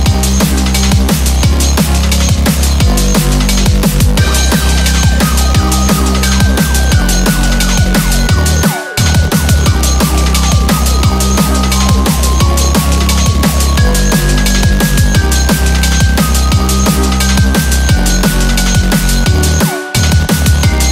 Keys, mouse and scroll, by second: 1.4 3, 1.6 4, 3.6 scroll down 4, 4.3 middle click, 4.3 2, 4.4 3, 4.9 scroll down 3, 5.9-6.2 scroll down 2, 6.9 scroll, 7.1 scroll down 1, 7.5 middle click, 19.4-20.9 typing.